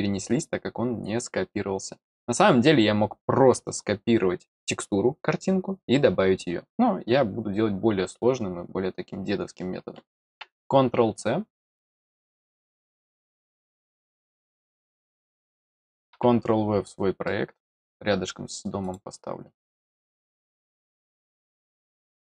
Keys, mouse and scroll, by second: 0.3 click, 12.4 click, 13.7 click, 17.2 middle click, 18.8 click, 20.6 click.